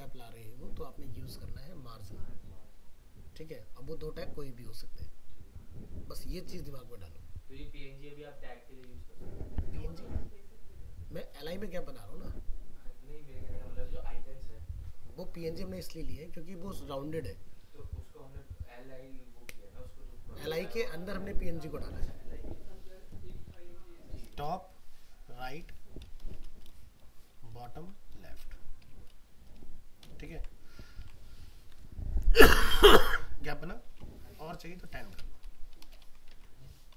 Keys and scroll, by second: 30.3 ctrl+s, 31.4 alt+Tab, 36.0 ctrl+s, 36.3 alt+Tab.